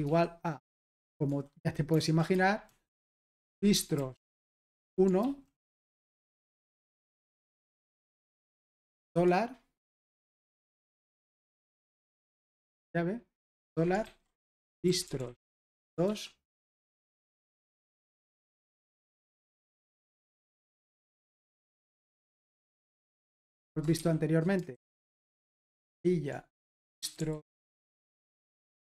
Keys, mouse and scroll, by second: 1.3-8.9 typing, 11.0-16.0 typing, 17.3-18.7 typing, 20.3 ), 20.5 Escape, 22.0-23.3 typing, 24.7 typing, 26.1-28.8 typing.